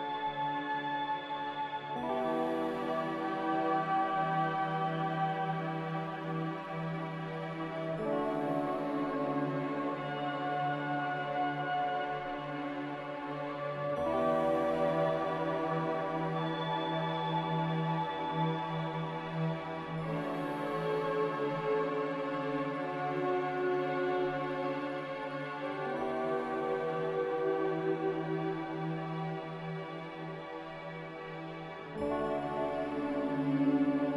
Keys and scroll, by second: 3.3 z, 12.0 z, 12.6 x, 15.2-15.9 typing, 18.2-19.0 typing, 21.2-22.0 typing, 23.4-24.2 typing, 27.2-27.9 typing, 31.0 c.